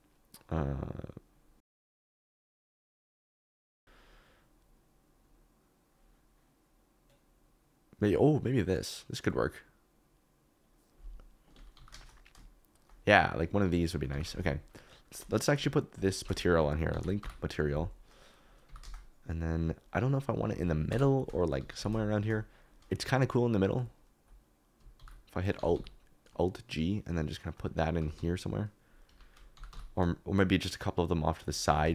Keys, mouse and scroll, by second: 3.5 click, 11.7 g, 11.9 shift+z, 12.7 shift+click, 13.1 KP_Decimal, 14.0 middle click, 14.1 g, 14.2 shift+z, 16.9 ctrl+l, 18.6 g, 18.8 shift+z, 20.8 KP_0, 21.5 g, 21.7 x, 25.0 alt+g, 25.5 g, 25.7 y, 27.9 r, 28.1 z, 29.0 Escape, 29.5 g, 29.6 x, 31.7 alt+d, 31.8 x.